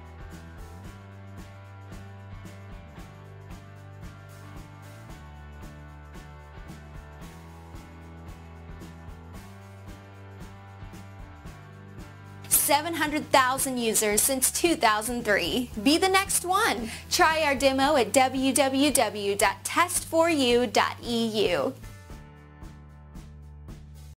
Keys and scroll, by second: 10.1 Return, 22.0-22.7 typing.